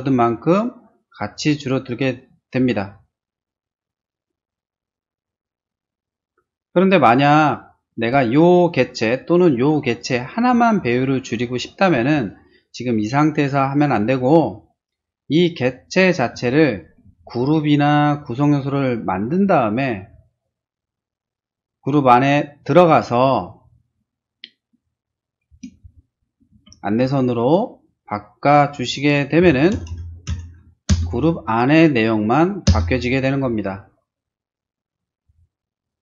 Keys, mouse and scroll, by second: 10.4-10.8 scroll down 4, 12.1 click, 14.4-14.7 scroll up 4, 14.9 middle click, 15.5 click, 15.7 click, 15.9 click, 16.5 shift+middle click, 17.3 shift+right click, 19.4 click, 20.4 click, 22.6 click, 22.7 click, 24.7 click, 25.6 space, 27.0 click, 27.9 click, 29.1-30.4 typing, 30.9 Return, 32.6 Return, 35.2 space, 35.7 click.